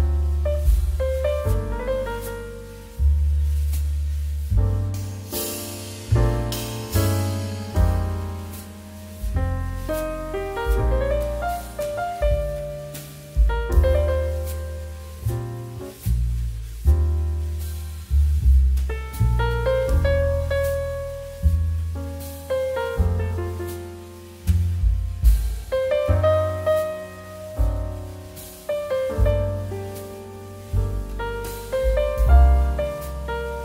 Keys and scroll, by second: 4.8 space, 5.4 2, 5.8 ctrl+s, 10.3 ctrl+h, 10.4 ctrl+space, 11.5 space, 13.5 space, 15.7 space, 16.3 z, 24.1 KP_1, 24.9 KP_Decimal, 25.9 KP_9, 30.6 ctrl+p, 30.9 ctrl+[, 32.3 ctrl+h, 32.4 ctrl+space.